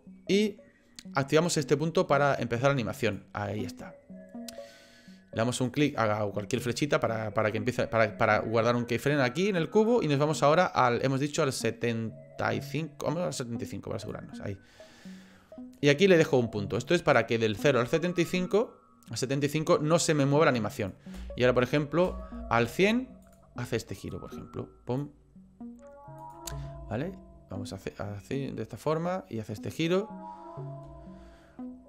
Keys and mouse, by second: 3.0 click, 5.7 click, 8.9 middle click, 9.9-14.1 drag, 15.7 click, 16.8-20.9 drag, 21.2 space, 22.1 space, 23.3 click, 24.1 click, 26.2 click, 26.5 space, 30.8 space.